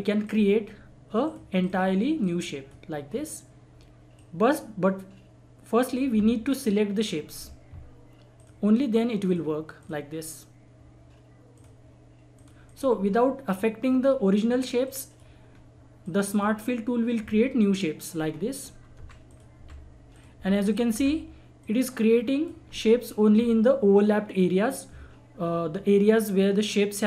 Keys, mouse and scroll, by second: 0.2 click, 0.3-8.3 drag, 13.0 scroll down 1, 13.5 click, 14.4-14.8 scroll up 1, 14.8 click, 15.5-15.9 scroll down 1, 16.0 click, 16.1-18.3 drag, 18.3-19.0 scroll up 1, 19.0 Delete, 19.3 click, 19.6 Delete, 20.1 click, 20.1 click, 20.3 Delete, 20.7 click, 20.9 Delete, 21.6-25.1 drag, 25.7 scroll up 1.